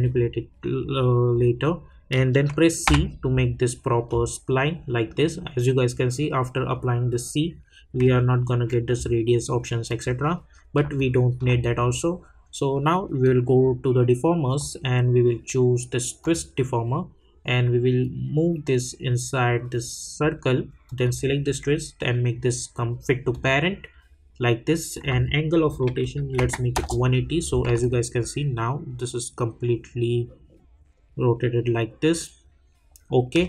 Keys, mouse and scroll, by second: 2.8 c, 9.9 click, 10.9-16.0 alt+drag, 16.2-21.0 drag, 23.3 click, 26.7 Return, 27.8-33.4 alt+drag.